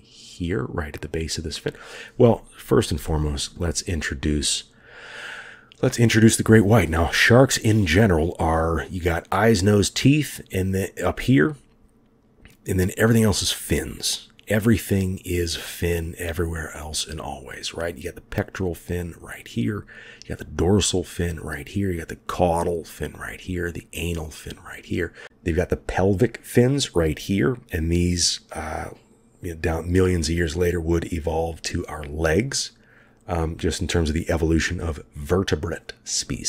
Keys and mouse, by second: 3.0 shift+click.